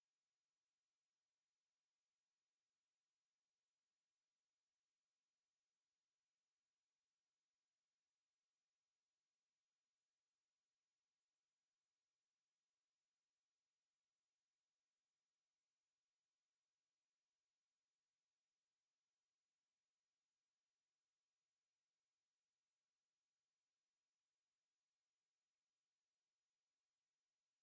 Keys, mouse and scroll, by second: 0.3 scroll up 1, 0.5 shift+middle click, 3.4 scroll down 1, 4.4 click, 5.6 shift+click, 7.3 shift+middle click, 8.4 shift+click, 9.3-9.7 scroll down 1, 9.8 middle click, 12.3-12.6 scroll up 1, 13.1 click, 15.2 middle click, 16.0 KP_7, 16.9 shift+middle click, 16.9-17.4 shift+scroll up 1, 19.0 shift+middle click, 19.2 middle click, 20.1 click, 20.4 middle click, 21.0 scroll up 1, 21.8 scroll up 2, 21.8 middle click, 24.5 shift+click, 24.8 middle click, 25.5 click, 25.9 shift+middle click, 27.3 click.